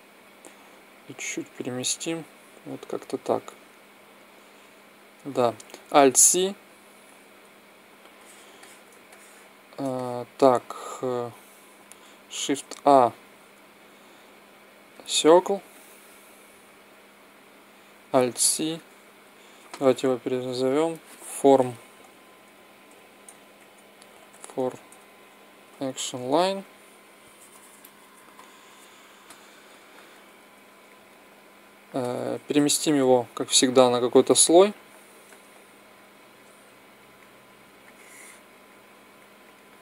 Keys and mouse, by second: 0.7-2.5 drag, 3.8-5.6 drag, 5.7 alt+c, 7.9-9.2 drag, 12.1 shift+a, 18.0 alt+c, 19.7 n, 20.5-22.2 drag, 29.4 n, 32.3 m, 34.2-37.3 drag, 35.7-37.3 right drag, 38.5 click, 39.5-39.8 right drag.